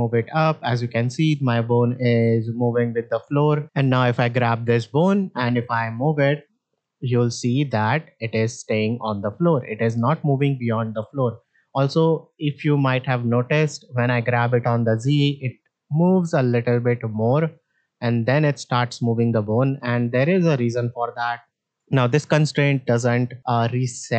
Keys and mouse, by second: 3.9 click, 4.7-9.5 drag, 12.3-12.7 shift+middle drag, 13.2 middle drag, 14.5-19.3 drag, 20.2 a, 21.5 alt+g, 21.6 alt+r, 22.2 shift+middle drag, 23.2 middle drag.